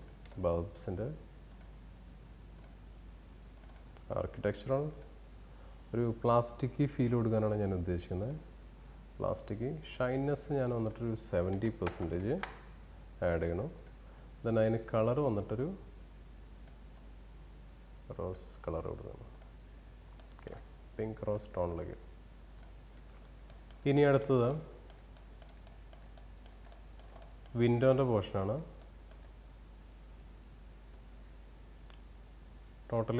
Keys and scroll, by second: 10.4 Return.